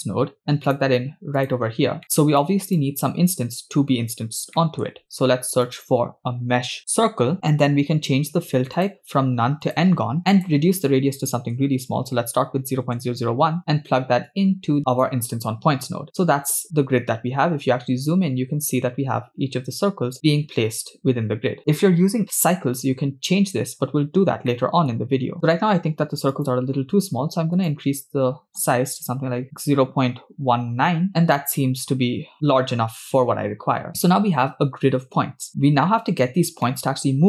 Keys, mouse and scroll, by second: 2.0 middle click, 2.4 click, 4.6 middle click, 5.0 shift+a, 8.8-9.9 drag, 10.3-12.9 drag, 11.9 0, 14.3-15.4 drag, 16.2-17.0 scroll up 8, 17.3-17.7 scroll down 3, 18.0-18.7 scroll up 4, 23.1-23.7 scroll up 5, 24.6 middle click, 26.6-31.1 drag, 32.4 scroll up 3, 33.5-34.7 scroll down 10, 35.2-36.2 scroll down 1, 36.9-37.2 middle drag.